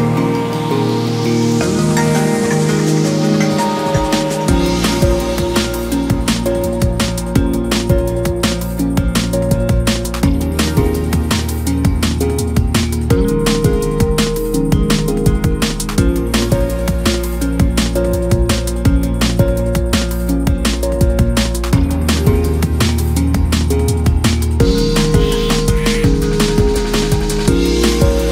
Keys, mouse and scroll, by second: 2.0-3.8 drag, 5.1 click, 5.5-7.2 right drag, 7.2 shift+click, 8.0 r, 10.9-11.4 middle drag, 11.4 Tab, 11.7 KP_3, 12.4 middle click, 12.7-13.0 scroll down 2, 13.0 Tab, 13.4 click, 13.5 click, 13.8 KP_3, 14.1 scroll up 4, 14.5 s, 15.4-15.9 scroll down 2, 15.6 Tab, 15.9-16.3 middle drag, 16.3-16.7 scroll up 1, 16.7 KP_1, 17.2 scroll up 1, 17.4 Tab, 17.8 shift+middle drag, 18.0-18.6 scroll up 2, 18.6 2, 18.9 drag, 19.4 s, 21.0 click, 21.8 s, 23.0 click, 23.2-23.9 scroll up 2, 23.9 shift+middle click, 24.4-25.3 scroll up 1, 25.3 scroll down 2, 25.4 middle click, 26.2 f, 26.4 3, 27.0 click, 27.5 click, 27.8 middle click, 28.1-28.3 scroll down 1.